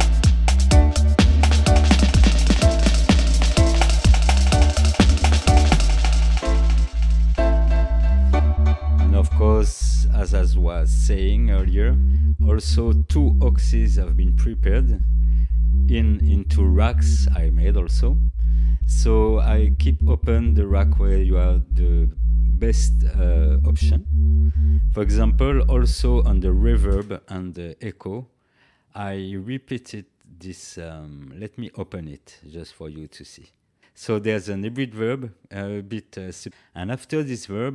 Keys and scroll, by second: 26.9 space.